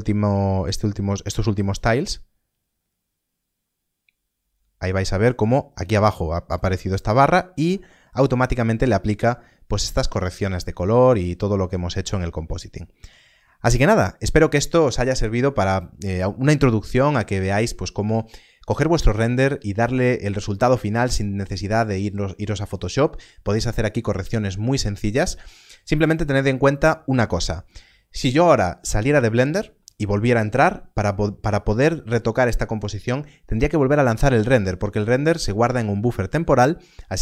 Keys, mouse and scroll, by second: 12.7 scroll up 1, 13.1 scroll down 1.